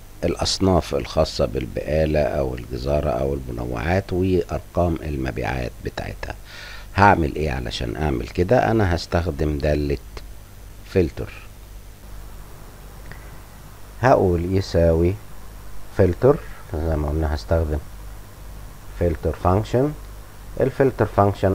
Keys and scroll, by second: 12.7 -, 13.3 =, 14.4-17.2 typing.